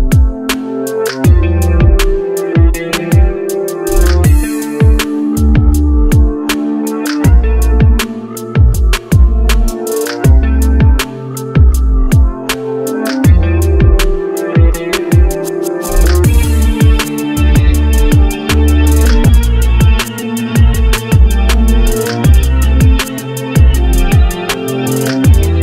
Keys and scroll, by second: 13.8 ctrl+c, 15.5 ctrl+v.